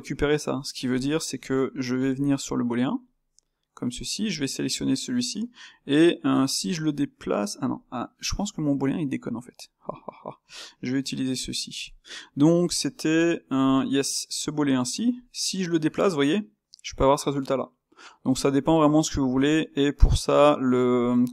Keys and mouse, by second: 3.0 space, 9.8 click, 10.9 '.